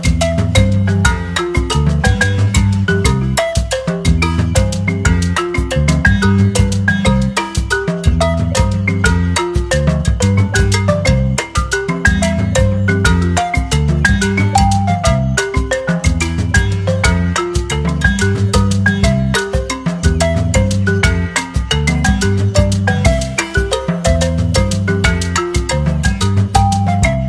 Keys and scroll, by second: 0.0-0.2 typing, 2.6 ctrl+c, 3.0 ctrl+v.